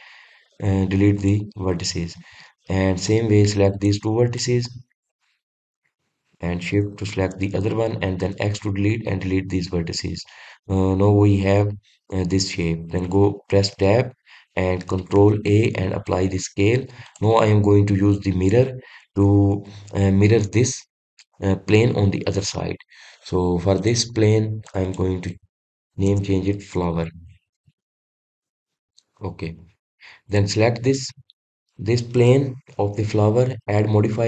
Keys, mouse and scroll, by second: 3.8 click, 5.1 click, 7.9 shift+click, 9.0 x, 10.7-11.1 scroll up 2, 15.9 ctrl+a, 17.8 click, 22.0 click, 24.5 click, 25.4 click, 25.6-28.8 drag, 30.3 click, 31.1 click.